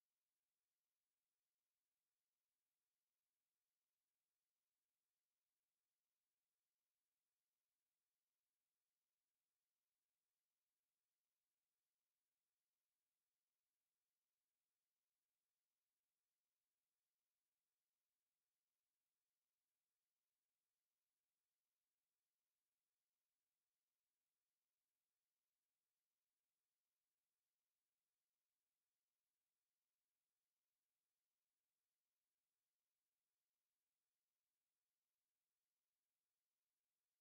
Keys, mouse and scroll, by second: 2.2 click, 3.8 click, 7.2 click, 9.6 click, 11.4 click, 12.8 click, 15.8 click, 17.9 click, 20.7 click, 22.0 click, 23.6 click, 24.7 click, 25.7 click, 30.6 space, 32.7 click, 36.8 space.